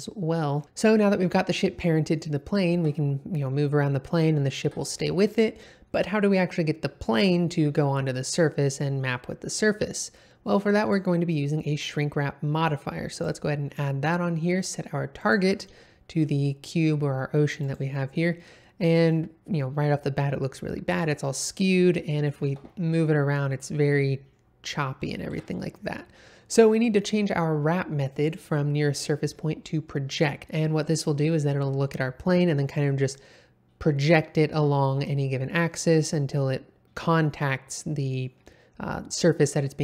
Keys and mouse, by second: 0.3 middle click, 2.7 g, 4.6 Escape, 10.8-13.3 drag, 15.2 click, 18.4-19.1 middle drag, 21.9 middle click, 22.4 g, 22.5 x, 25.3 Escape, 28.2-30.2 drag, 35.0-35.5 middle drag.